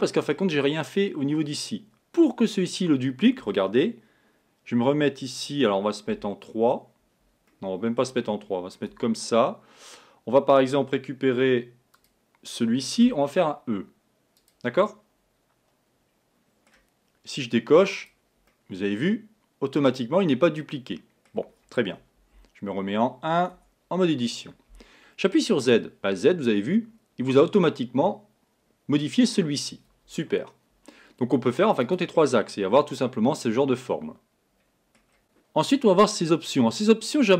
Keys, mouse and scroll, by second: 6.1 KP_3, 7.5-8.9 middle drag, 8.9 Tab, 12.0 click, 13.1 e, 14.9-17.9 middle drag, 18.0 click, 18.5-21.5 middle drag, 22.2 KP_1, 23.5 Tab, 25.6 click, 26.1 scroll down 2, 31.8 click, 32.4-35.2 middle drag.